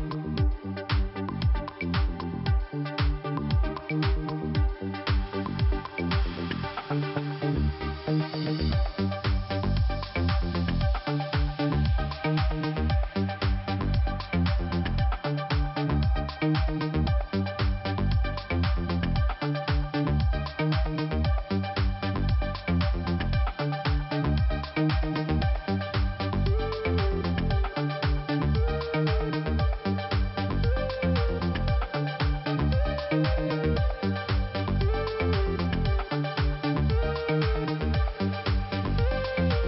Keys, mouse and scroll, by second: 0.7 click, 0.8 click, 1.4 click, 2.5 click, 2.6 click, 3.0 click, 4.2 click, 4.3 click, 4.7 click, 6.4 click, 8.1 scroll up 2, 9.2 click, 10.0 click, 11.9 click, 13.9 click, 13.9 click, 14.2 click, 15.0 click, 15.1 click, 17.2 click, 18.1 middle click, 22.3 click, 23.6 click, 24.7 middle click, 26.3 click, 28.3-29.0 scroll down 1, 29.4 click, 30.1 click, 31.5 click, 31.5 click, 32.6 click, 34.0 click, 34.0 click, 34.6 click, 35.3 click, 35.9 click, 37.7 click, 37.8 click, 38.3 click, 39.3 click.